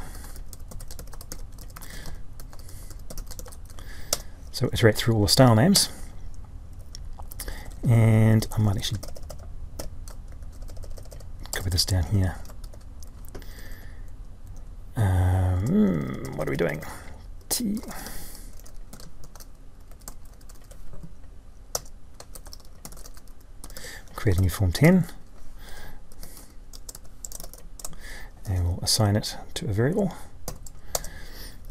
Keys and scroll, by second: 10.1 ctrl+x, 12.5 ctrl+c, 24.3 ctrl+Left.